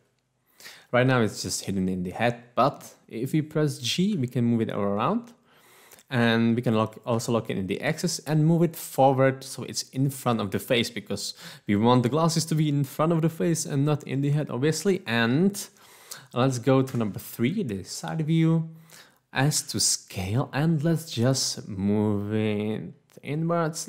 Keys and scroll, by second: 4.2 g, 7.5 x, 16.9 3, 19.6 s.